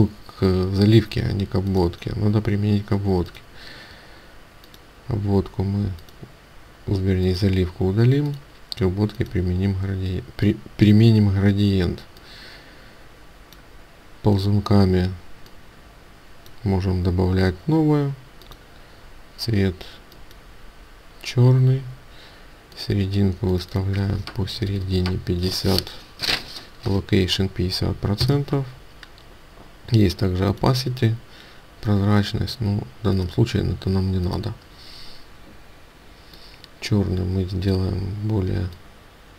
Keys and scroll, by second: 28.2 Return.